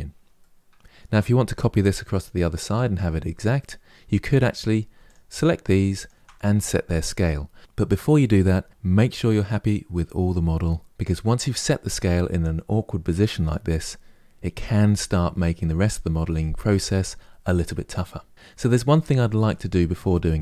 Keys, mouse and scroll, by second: 0.1-3.1 middle drag, 3.3-4.3 middle drag, 4.3 click, 4.8 shift+click, 5.7 shift+click, 18.8-20.4 middle drag.